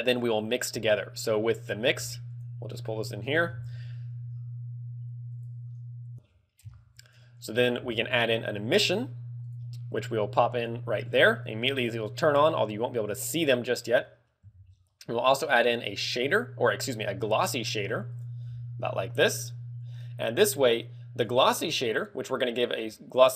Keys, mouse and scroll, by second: 0.9 g, 1.8 click, 2.2 g, 2.6 click, 3.0 click, 3.7 shift+a, 7.7 g, 9.4 click, 9.9 click, 11.4 click, 14.5 shift+a, 18.5 g, 19.2 click, 19.7 click, 22.3 ctrl+click.